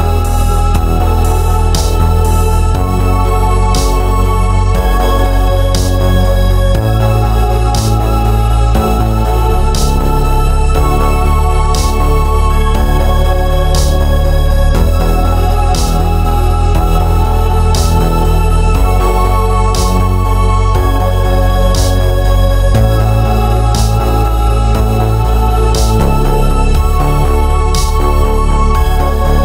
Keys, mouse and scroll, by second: 0.0 KP_1, 0.4 KP_3, 0.9 scroll up 1, 1.1-4.9 shift+middle drag, 1.5-1.9 scroll up 1, 1.9 Tab, 2.6 ctrl+r, 4.9 click, 5.1 scroll up 1, 5.4 shift+middle click, 5.9-6.7 scroll up 1, 6.7 shift+z, 8.0 click, 8.5 g, 9.7 click, 10.1 ctrl+b, 11.0 Escape, 12.7 ctrl+r, 13.6 click, 14.4 g, 15.5 click, 15.9 ctrl+r, 16.9 click, 17.1 g, 18.7 click, 19.1 middle click, 19.7 click, 19.9 scroll down 1, 20.0 middle click, 20.6 shift+z, 20.9 click, 21.0-23.9 middle drag, 23.9 click, 24.3 g, 27.1 click, 27.3 middle click, 27.9 ctrl+z, 28.1 click, 28.3-28.9 scroll down 1, 28.9-29.4 middle drag.